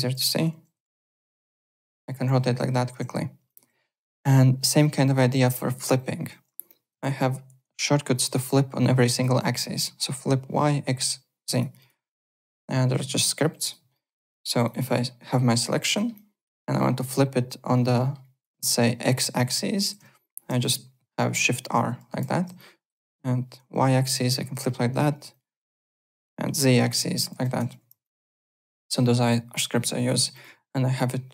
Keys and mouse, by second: 0.0-0.1 typing, 3.0 alt+Tab, 3.4 alt+click, 5.3 click, 5.9 click, 7.0 Home, 8.3 click, 11.5 click, 12.4 click, 13.6 click, 13.9 alt+middle click, 14.1 alt+click, 14.9 alt+middle click, 15.6 click, 15.9 alt+middle click, 16.1 alt+click, 16.5 alt+middle click, 16.8 alt+click, 18.0 alt+middle click, 18.2 alt+click, 18.4 alt+right click, 19.4 alt+click, 21.2 shift+r, 22.5 alt+click, 23.6 alt+r, 25.3 alt+click, 25.7 alt+middle click, 25.9 alt+click, 26.8 ctrl+r, 28.0 alt+click, 28.3 alt+right click, 28.6 alt+middle click, 29.2 alt+Tab, 29.7 alt+click, 30.1 alt+Tab, 30.3 alt+click.